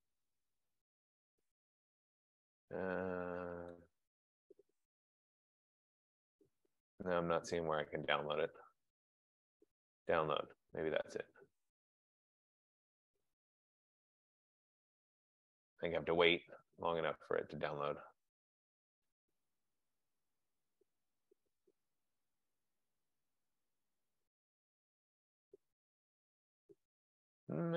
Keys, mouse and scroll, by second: 0.1 middle click, 1.4 right click, 1.4-1.8 scroll, 4.1 click, 5.6-6.8 scroll, 6.8-7.8 scroll, 10.2 click, 18.1 F15.